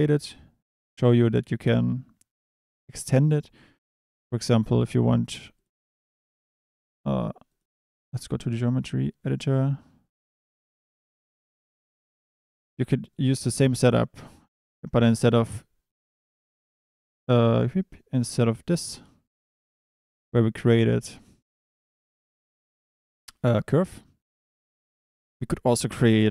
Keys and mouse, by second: 4.5 click, 4.9 click, 7.6-10.2 drag, 10.9 middle click, 11.8 middle click, 14.3 click, 14.7 Tab, 15.9 drag, 25.6 click.